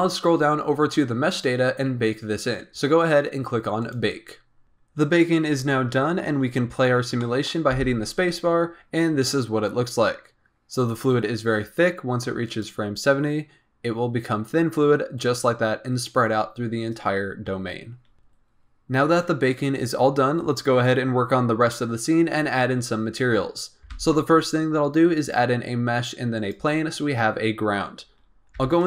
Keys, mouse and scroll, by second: 0.2-3.8 scroll down 15, 3.8-4.9 drag, 7.2 middle click, 7.7 space, 12.7 click, 23.9 shift+a, 28.5 KP_1.